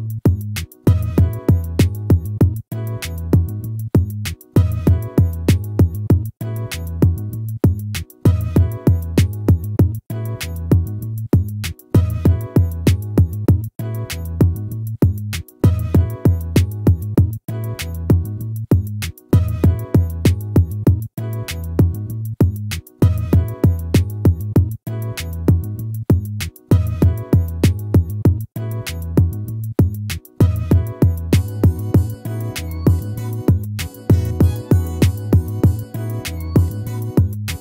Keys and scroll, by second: 14.9 ctrl+-.